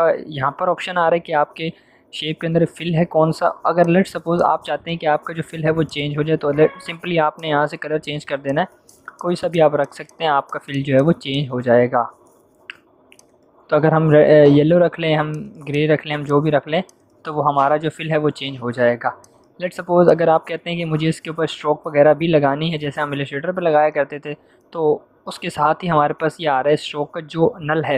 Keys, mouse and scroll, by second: 3.7 click.